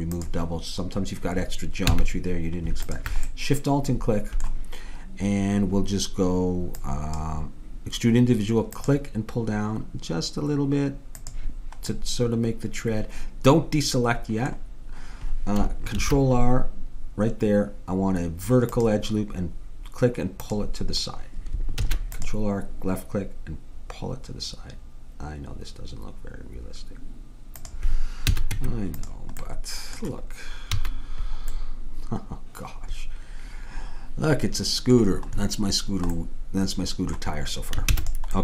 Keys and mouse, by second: 2.0 a, 2.9-4.7 drag, 4.7 middle click, 6.8-8.7 drag, 8.8-10.6 drag, 12.0-13.2 middle drag, 16.0 ctrl+r, 21.9 ctrl+r, 28.3 a, 28.6 Tab, 30.8 a, 33.5-36.2 middle drag, 37.9 ctrl+s.